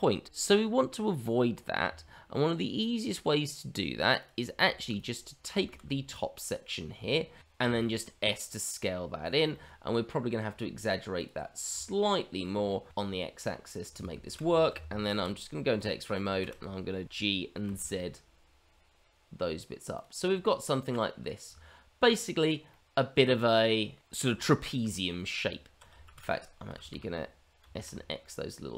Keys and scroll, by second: 0.2 ctrl+z, 1.8 Tab, 4.6 shift+z, 5.6 shift+z, 7.6 s, 12.8 s, 14.2 shift+x, 15.0 shift+z, 16.4 shift+z, 17.0 g, 21.4 Tab, 25.4 Tab, 26.0 shift+z, 26.7 shift+z, 27.6 s.